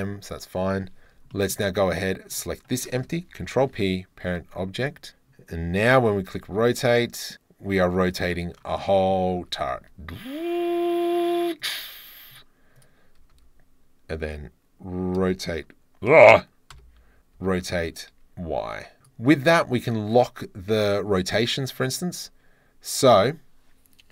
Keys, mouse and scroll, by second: 1.3 shift+drag, 3.5 ctrl+p, 5.8 r, 6.2 z, 8.1 click, 8.7 click, 9.4 r, 9.7 z, 11.6 click, 12.3 click, 12.7 click, 13.2 r, 13.3 r, 16.8 e, 17.3 r, 17.7 y, 19.0 ctrl+z.